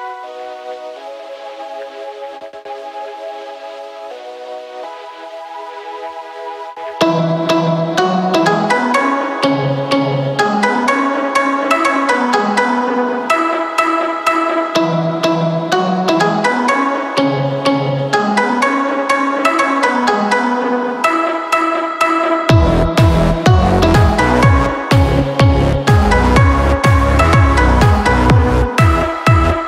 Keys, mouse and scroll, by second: 2.9 ctrl+i.